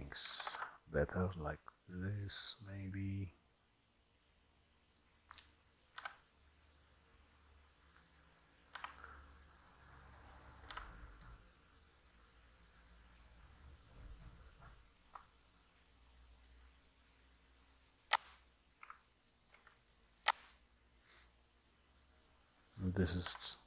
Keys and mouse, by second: 5.1 click, 6.1 n, 8.8 n, 10.0 click, 10.9 n, 11.4-15.3 shift+middle drag, 18.1 click, 18.9 s, 23.4 n.